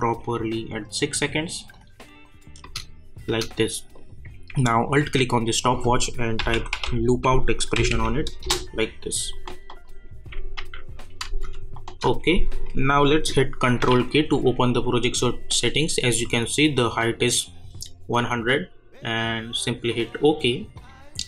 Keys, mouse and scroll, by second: 2.6 space, 3.9 click, 5.0 alt+click, 6.1-7.3 typing, 7.7 Down, 8.4 Return, 9.7 click, 10.6 u, 11.2 space, 13.8 ctrl+k, 19.9 click.